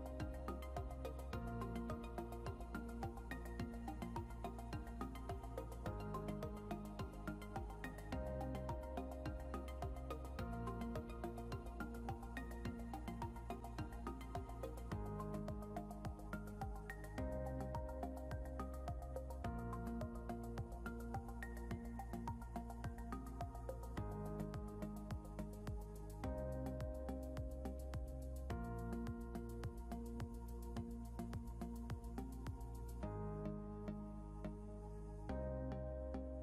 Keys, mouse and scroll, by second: 0.0-5.4 typing, 8.8 right click, 10.6 alt+Tab, 17.2 ctrl+q, 18.1 scroll down 1, 22.2-22.7 scroll up 1, 34.6 shift+click.